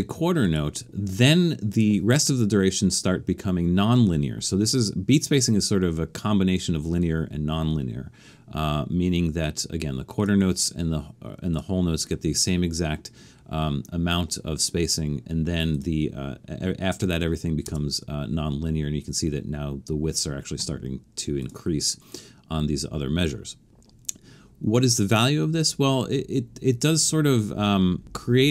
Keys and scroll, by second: 17.7 Return.